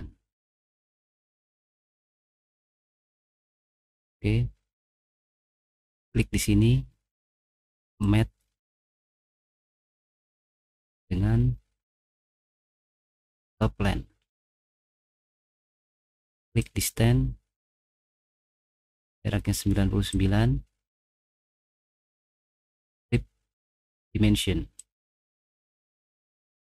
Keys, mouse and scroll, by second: 1.2 click, 3.4 right click, 4.1 middle click, 6.1 click, 8.0 click, 11.8 scroll up 1, 13.4 click, 15.7 click, 16.6 click, 19.0 click, 20.2 click, 22.1 9, 22.3 9, 26.4 middle click.